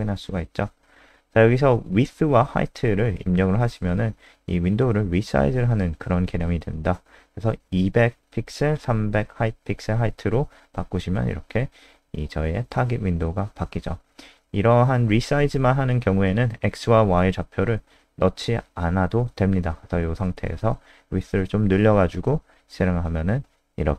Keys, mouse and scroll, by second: 2.3-4.1 typing, 6.5 F5, 13.5 click, 13.8 click, 14.5 BackSpace, 14.9 ctrl+Left, 15.4 Right, 16.3 ctrl+shift+Left, 16.5 BackSpace, 16.7 ctrl+s, 19.1 click, 19.7 ctrl+shift+Left, 19.7-21.0 typing, 22.2 F5.